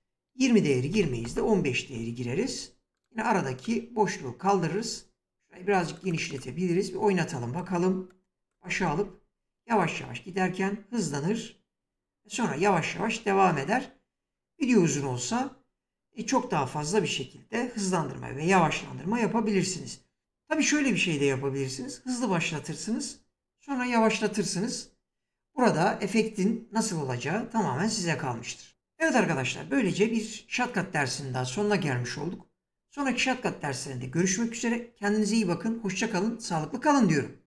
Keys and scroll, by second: 0.1-1.1 typing, 8.3 space.